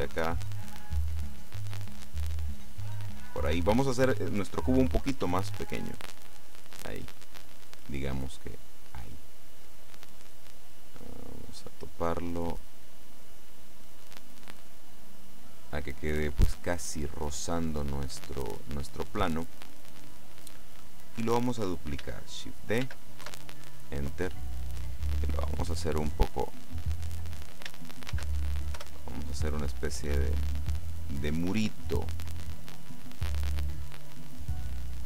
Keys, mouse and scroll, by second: 1.0 middle click, 4.0 right click, 5.3 s, 6.5 click, 6.8 middle click, 8.3-9.4 scroll up 1, 9.9-11.9 middle drag, 12.0-15.9 drag, 15.7 middle click, 15.7 right click, 18.7-19.2 scroll down 1, 19.2 middle click, 20.7 middle click, 23.0 shift+d, 23.4 shift+KP_Enter, 25.2-27.4 drag, 28.2 shift+d, 29.3 Return, 29.7-35.0 drag.